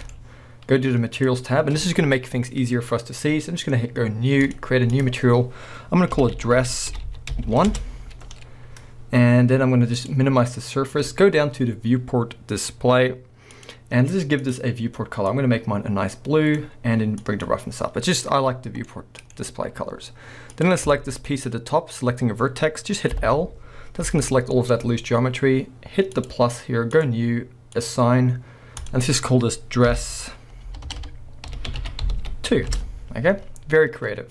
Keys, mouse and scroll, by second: 0.0-1.2 middle drag, 1.2 click, 4.4-14.6 drag, 7.1 s, 7.8 Return, 17.2-18.9 drag, 18.9 middle click, 20.5 click, 20.9 shift+middle click, 21.2 scroll up 1, 23.2 l, 24.0 g, 24.7 right click, 26.1-32.2 drag, 30.9 BackSpace, 32.2 s, 32.7 Return.